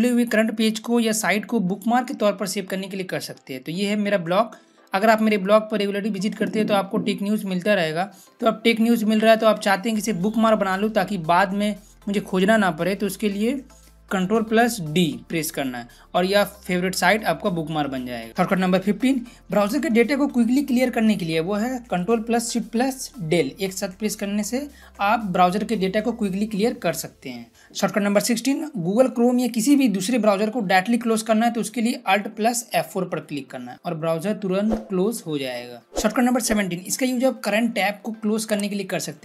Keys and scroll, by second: 14.7 ctrl+d, 23.1 ctrl+shift+Delete, 32.4 alt+F4.